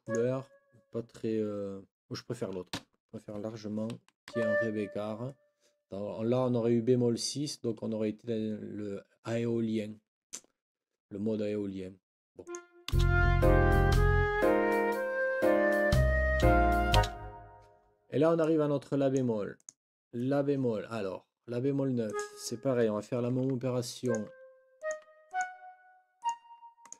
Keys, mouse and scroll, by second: 0.0 click, 4.3 Up, 12.4 click, 12.9 space, 17.0 space, 18.4 click, 19.6 click, 22.0-22.4 scroll up 1, 23.2 Delete, 24.3 Delete, 25.0 Delete, 25.7 Delete, 26.4 Delete, 26.8 click.